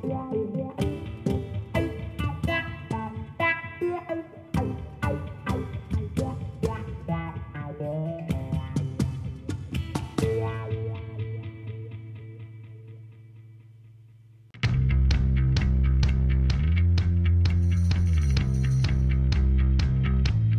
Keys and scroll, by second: 1.3 Tab, 2.9 s, 8.0 3, 8.7 Tab, 9.6 g, 12.8 Tab, 13.7 1, 15.4 shift+z, 17.5 g, 17.7 y.